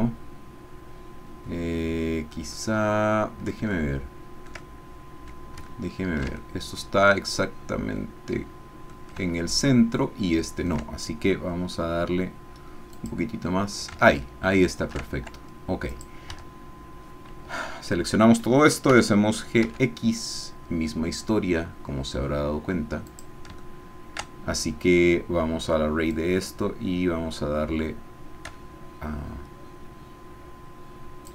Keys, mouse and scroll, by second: 2.6 click, 3.7-5.0 shift+drag, 5.0 middle click, 5.7-8.9 ctrl+middle drag, 9.2-10.8 shift+middle drag, 12.9 click, 14.1 shift+middle click, 16.0 click, 16.3 Tab, 17.5 a, 18.9 g, 19.6 x, 23.1 click, 23.6-26.1 shift+middle drag, 26.1-31.3 drag.